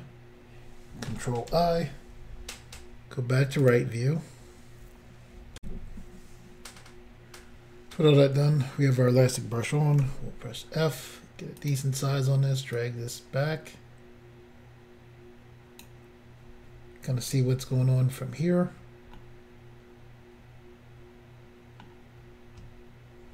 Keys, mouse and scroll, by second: 1.5 ctrl+i, 3.6 click, 3.7 click, 5.6 Insert, 10.0 f, 11.6 click, 11.7 click, 12.8 click, 19.2 middle click.